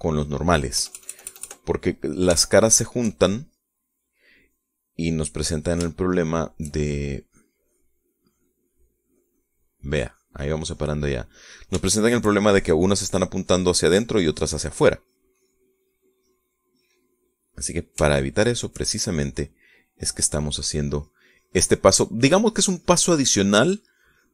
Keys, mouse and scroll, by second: 0.1 shift+middle click, 0.9 shift+middle click, 1.7 KP_Add, 3.4 shift+middle click, 6.1-7.9 middle drag, 8.2 click, 12.1-13.5 middle drag, 13.5 shift+click, 14.0 shift+click, 17.2 shift+click, 17.7 shift+click, 18.1 shift+middle click, 19.1 shift+middle click, 20.5 middle click, 21.9-24.3 drag.